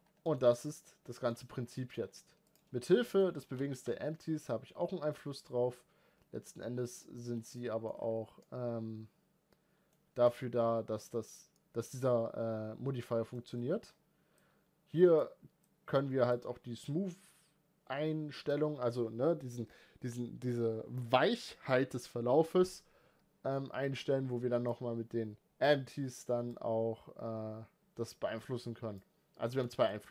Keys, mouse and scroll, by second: 0.0-1.1 shift+middle drag, 1.1-1.5 scroll down 5, 1.5 middle click, 1.8-2.3 scroll up 2, 2.3 click, 2.6-3.0 middle drag, 3.0 scroll up 1, 3.3 g, 7.1 scroll down 3, 7.3-7.7 middle drag, 7.7-8.0 scroll up 3, 8.2-9.9 middle drag, 9.9 click, 14.1-29.2 drag, 29.2 scroll down 2, 29.4-29.7 middle drag, 29.7 scroll up 2.